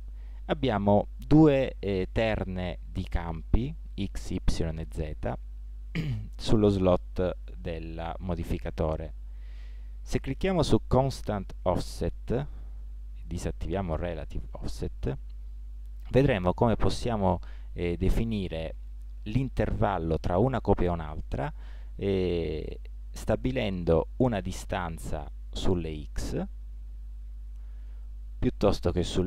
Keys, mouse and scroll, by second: 11.3-13.3 drag, 13.4-15.4 drag, 22.7-29.2 drag.